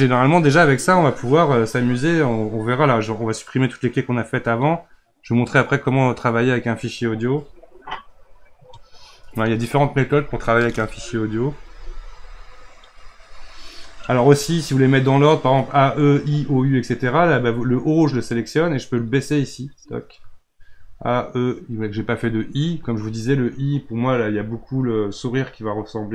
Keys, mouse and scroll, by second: 2.7-5.7 drag, 7.9 click, 18.1 click, 19.4 click, 25.5 click.